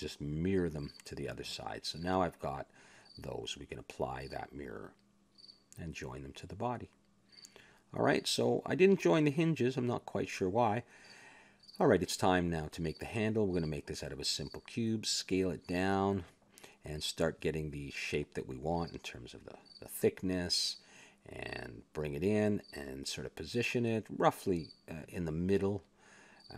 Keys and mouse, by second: 0.7 click, 2.6 click, 2.7 a, 2.7-3.8 middle drag, 4.2-5.4 middle drag, 5.4 click, 6.4 middle click, 7.3 ctrl+j, 8.4 a, 9.7 KP_1, 11.2 right click, 11.7 click, 11.7 shift+s, 13.1 shift+a, 14.2 Tab, 14.9 s, 16.2 click, 17.0 middle click, 17.5 KP_Decimal, 19.4 s, 20.9 s, 21.8 middle click, 22.2 click, 22.9 middle click, 23.6 KP_1, 24.4 click, 25.5 s.